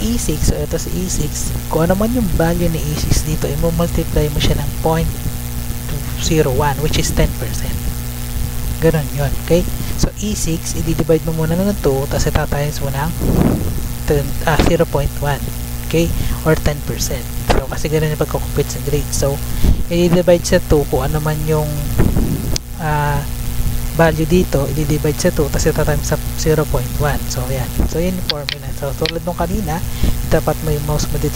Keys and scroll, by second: 27.6 Return.